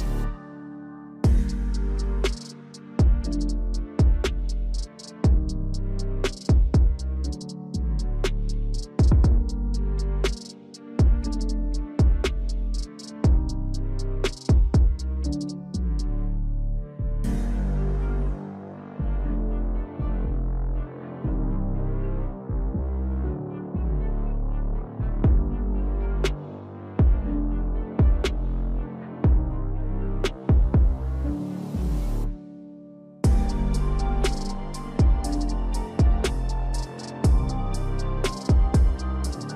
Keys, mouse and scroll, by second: 7.1 right click, 33.5 right click.